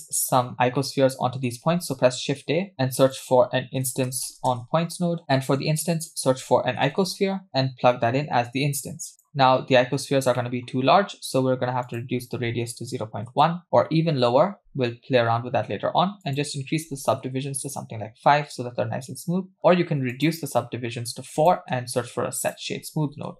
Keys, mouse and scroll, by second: 0.8 middle click, 1.7 q, 2.7 shift+a, 5.2 middle click, 5.2 scroll up 2, 5.4 shift+a, 7.5-9.9 drag, 10.4 middle click, 10.8-11.5 scroll up 2, 11.8-13.6 drag, 16.2-17.9 drag, 18.7-19.2 scroll up 1, 19.2 scroll up 2, 20.1-20.8 drag, 21.1-21.5 drag, 21.8 shift+a.